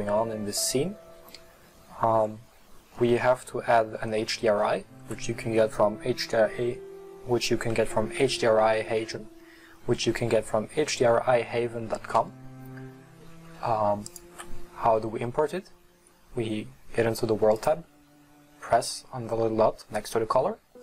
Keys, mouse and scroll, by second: 1.7-2.4 scroll down 3, 2.4-3.0 scroll up 4, 3.0-8.1 middle drag, 14.1 click.